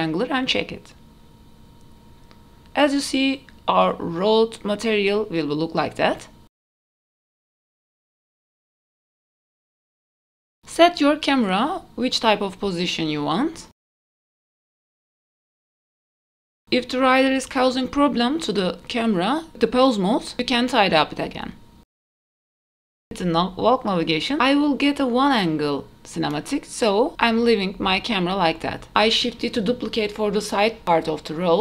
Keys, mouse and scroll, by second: 0.0-0.5 drag, 0.0 middle click, 0.0-0.5 scroll up 3, 0.5-0.9 scroll down 2, 1.0-2.4 middle drag, 2.6 alt+h, 2.6 click, 3.6 click, 4.5 click, 5.0-5.5 middle drag, 5.6 middle click, 6.2 KP_0, 7.2 q, 14.4 middle drag, 14.6 scroll down 4, 14.9 shift+middle drag, 15.3 click, 16.5 click, 17.0-19.7 typing, 18.2 click, 18.9 click, 19.6 click, 20.4 click, 20.9 click, 21.0 g, 21.6 r, 22.8 click, 24.0 KP_0, 25.1 click, 25.8 q, 28.2 shift+middle click, 28.2 scroll down 10, 28.6 s, 30.5 shift+middle click, 31.3 ctrl+s, 31.3 click, 31.3 middle click, 31.3 scroll down 2.